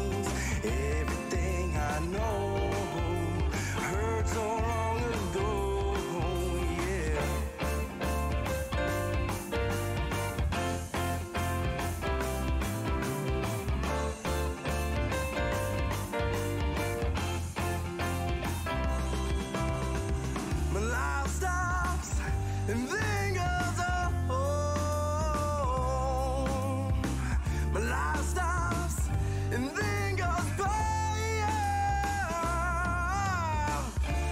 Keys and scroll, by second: 0.5 Tab, 3.3 alt+Tab, 4.3 alt+Tab, 13.6-18.8 typing, 20.8 space, 21.6 h, 22.2 e, 23.8 Return.